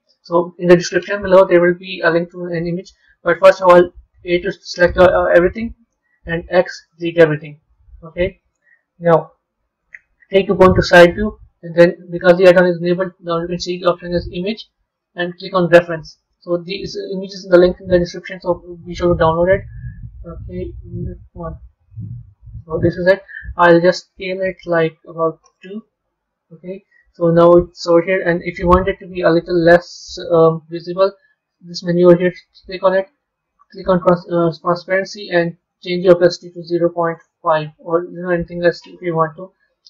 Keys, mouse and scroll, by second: 3.8 a, 4.1 a, 6.3 x, 7.4-9.7 middle drag, 9.7 KP_3, 12.8 shift+a, 22.3-24.3 scroll up 2, 24.3 s, 26.8-29.9 middle drag, 30.0 KP_3, 32.1 click, 33.4-34.4 drag, 34.8-38.6 drag.